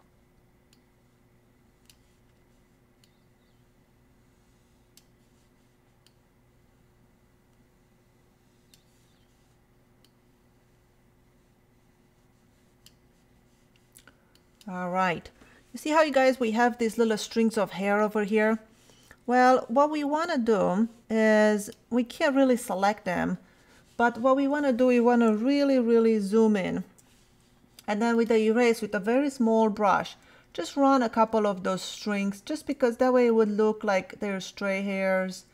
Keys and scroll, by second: 16.1 space, 26.3 super+=, 29.5 [, 30.2 ], 30.9 [, 32.3 ], 32.8 [.